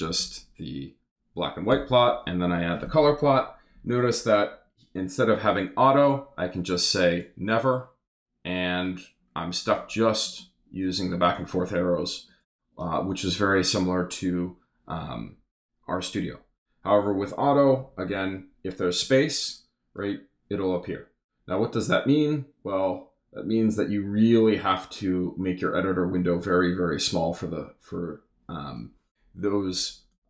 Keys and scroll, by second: 0.1 Delete, 1.7 super+Return.